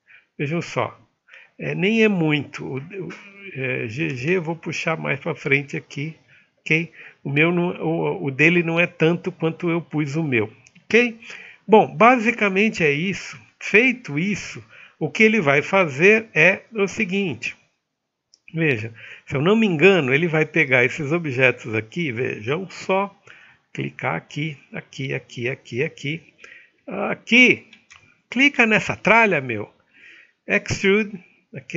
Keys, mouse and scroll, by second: 0.1 alt+middle click, 11.3 middle click.